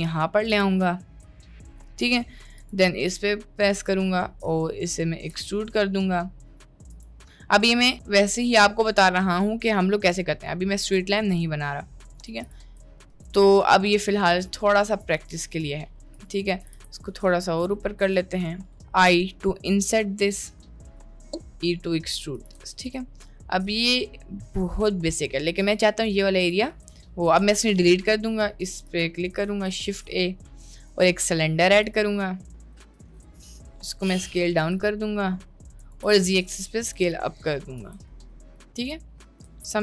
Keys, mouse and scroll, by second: 0.8-1.8 middle drag, 2.0 3, 3.8 click, 5.3 e, 7.4 middle click, 8.0 Tab, 11.0 s, 12.5 click, 13.1-13.7 shift+middle drag, 13.8 Tab, 14.2 shift+middle click, 15.4 middle click, 16.6 g, 18.8 i, 21.4 e, 22.7 Tab, 22.9-23.9 middle drag, 24.5-24.9 middle drag, 25.7-26.5 drag, 27.4 Delete, 28.9 click, 29.5 shift+a, 32.7 click, 32.9 s, 34.6 s, 36.1 s, 37.8 s, 39.4 middle drag.